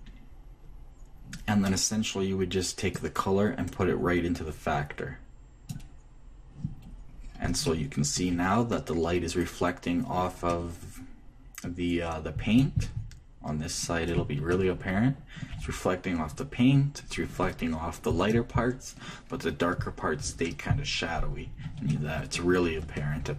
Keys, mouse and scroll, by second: 3.6-5.5 drag, 8.2-12.1 shift+middle drag, 22.6-23.3 shift+middle drag.